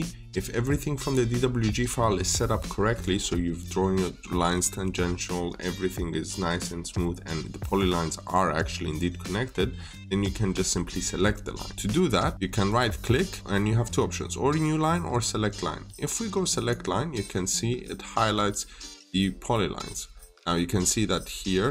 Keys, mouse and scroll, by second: 11.7 scroll up 1, 12.5 right click, 16.4 click, 18.7 middle click.